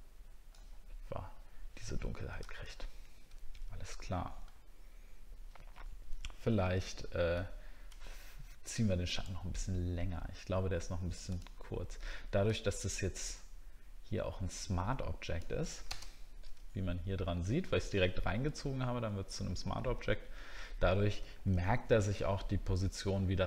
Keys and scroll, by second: 18.6 alt+scroll down 1.